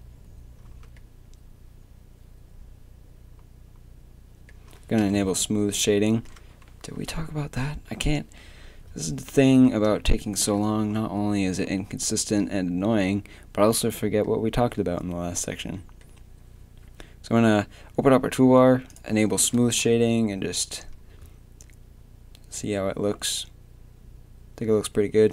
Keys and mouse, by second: 0.7 Tab, 5.0 t, 10.2-12.1 drag, 12.1 middle click, 12.4-14.5 drag, 18.9-21.4 drag, 21.4-24.8 middle drag.